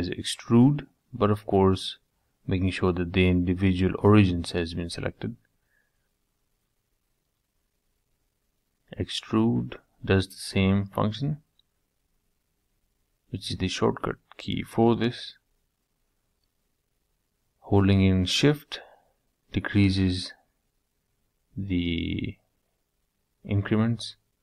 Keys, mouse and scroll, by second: 1.6-3.6 middle drag, 6.1 ctrl+z, 6.9 e, 9.9-11.7 middle drag, 12.3 ctrl+z, 13.1 e, 16.7 middle click, 17.1 scroll down 4, 17.3-19.0 middle drag, 19.0 Tab, 19.3 middle click, 19.9 scroll up 2, 20.2-20.9 middle drag, 20.9 Tab, 21.5 click, 23.4 e.